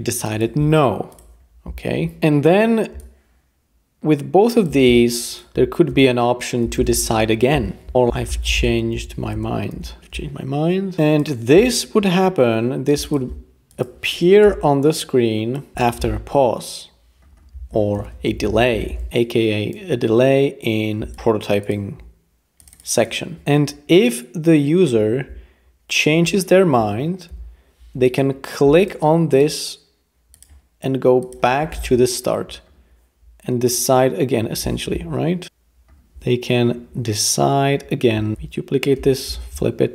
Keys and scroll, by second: 5.5-10.2 typing, 7.9 alt+h, 14.4 Return, 15.7 typing, 18.0-19.7 typing, 27.3 p, 31.8 Return, 34.9 p, 35.4 super+v, 38.3 Page_Up, 39.3 shift+v.